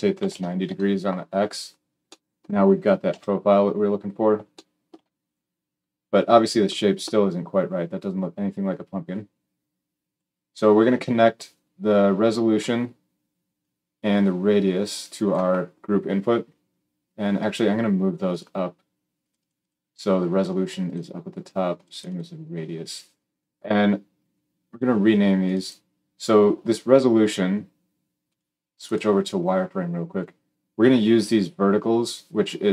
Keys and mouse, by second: 3.0 KP_1, 18.3-19.1 middle drag, 19.1-20.8 drag, 20.8-21.7 middle drag, 21.7-28.3 drag, 28.3 middle click, 28.7 click, 28.9-32.7 middle drag.